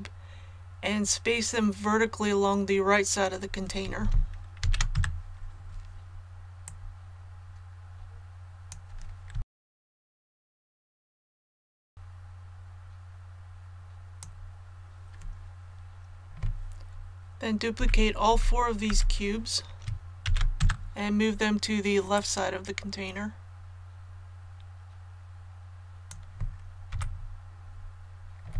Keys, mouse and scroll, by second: 4.6 shift+d, 6.6-9.3 drag, 9.4 shift+d, 9.8 click, 10.9 shift+d, 11.6-14.2 drag, 17.7-18.8 typing, 20.2 shift+d, 22.1-26.2 drag, 26.9 a, 27.6 click.